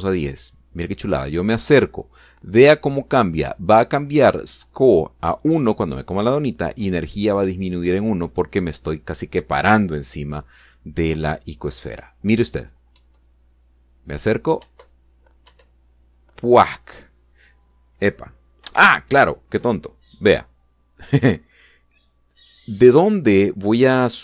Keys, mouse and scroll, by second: 0.1 Up, 13.8 Up, 15.4 Up, 16.2 Up, 19.4 Escape, 22.0 click.